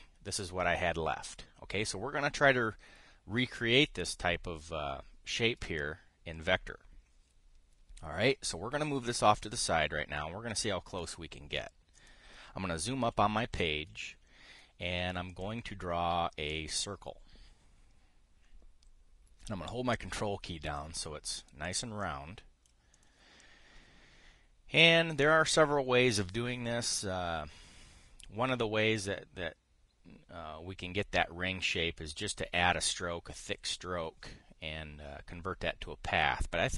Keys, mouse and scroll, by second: 9.1-11.8 drag, 12.7 click, 13.8 KP_5, 16.0 click, 17.2-20.1 drag, 22.8 click, 23.7 click.